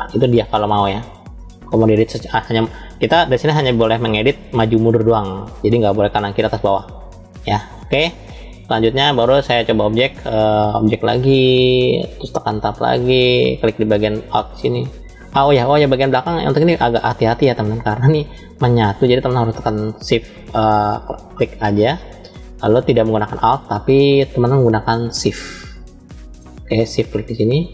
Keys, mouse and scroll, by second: 3.9 ctrl+z, 8.8-9.6 drag, 10.3 click, 12.2 Tab, 15.2-18.0 middle drag, 20.4 click, 25.0-26.1 middle drag, 26.9 shift+click.